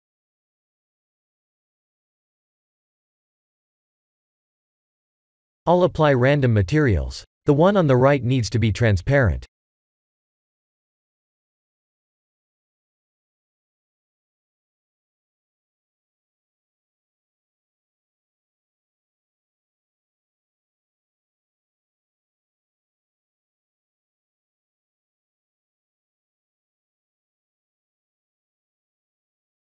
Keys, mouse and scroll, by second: 1.3 click, 2.8 click, 3.7 click, 8.0 click, 9.7 drag, 15.6 click, 20.0 drag, 24.6 click, 26.2 click, 28.2 drag, 29.3 click.